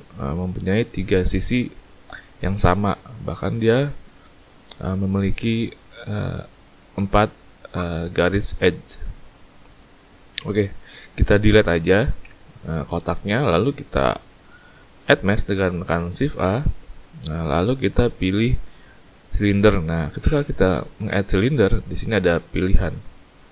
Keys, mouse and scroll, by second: 0.4 click, 3.9 middle click, 5.0 middle click, 7.6 middle click, 9.3 middle click, 10.6 Tab, 12.2 Delete, 13.1-13.6 scroll up 2, 13.6 scroll down 2, 16.3 shift+a.